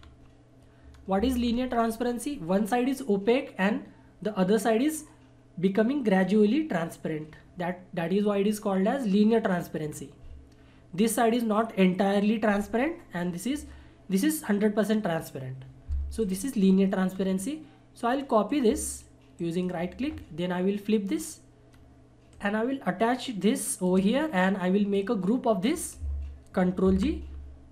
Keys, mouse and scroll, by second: 0.9-1.8 scroll up 1, 9.9 scroll down 1, 16.2 click, 17.1 scroll down 1, 18.4 click, 19.4-21.1 shift+right drag, 21.1 click, 21.7 scroll up 1, 22.3-24.1 drag, 24.1 shift+scroll down 1, 24.9-26.8 shift+drag, 26.8 ctrl+shift+g.